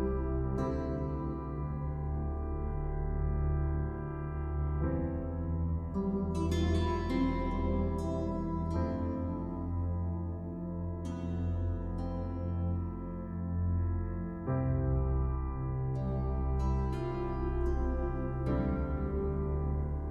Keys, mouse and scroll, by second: 0.5 click, 0.9 click, 1.6 click, 2.0 click, 2.3 click, 2.7 click, 7.2 click, 7.9-10.0 typing, 11.2-13.5 typing, 11.9 scroll up 1, 13.8 click, 14.5-14.9 typing, 16.5 ], 16.8 click, 17.2 ], 17.7 click, 18.1 ], 18.2 click, 19.8 ].